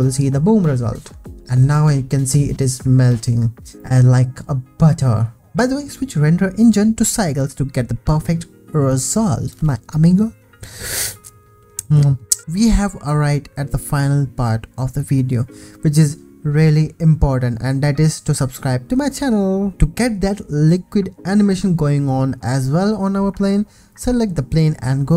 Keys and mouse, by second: 1.5 ctrl+s, 6.0-12.4 shift+middle drag, 23.8 ctrl+s.